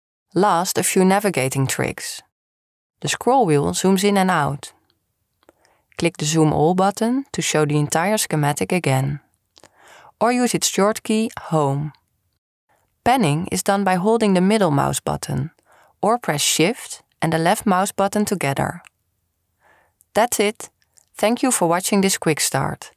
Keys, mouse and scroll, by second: 3.9-8.4 middle drag, 8.9 middle click, 14.4-17.1 middle drag, 18.3-20.9 drag, 21.4 click.